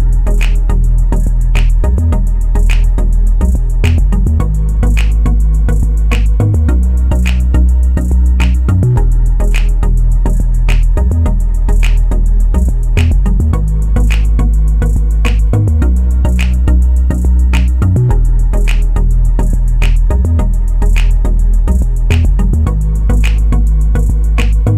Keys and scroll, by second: 18.8-19.7 typing, 21.3-22.2 typing, 23.3-24.2 typing.